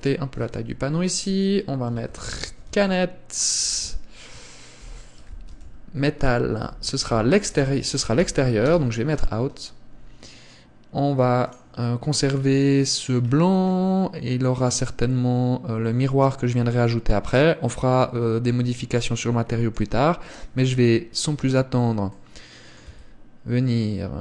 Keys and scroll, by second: 23.2 Tab.